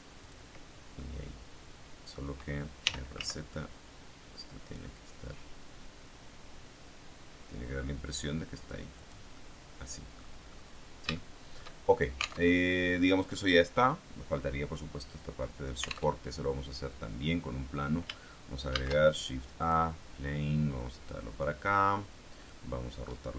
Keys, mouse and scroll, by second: 0.1 click, 0.9-2.2 middle drag, 2.7 r, 3.1 z, 8.9 click, 9.3 middle click, 10.5-11.1 scroll up 3, 11.1 shift+middle click, 11.7-12.4 shift+scroll down 1, 12.4 alt+Tab, 16.1 alt+Tab, 16.3-16.9 alt+scroll down 1, 18.6 shift+a, 19.5 click, 21.0-22.6 drag.